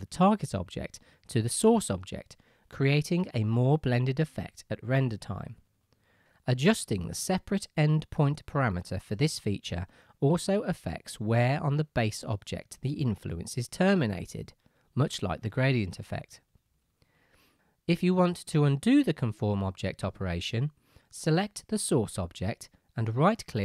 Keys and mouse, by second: 0.1-0.9 right drag, 1.2 middle click, 1.5 right drag, 1.7 middle drag, 1.7-3.3 right drag, 3.3 middle click, 3.4-13.5 right drag, 7.0-13.5 drag, 7.0-17.1 middle drag, 17.5 click, 18.0-23.6 right drag.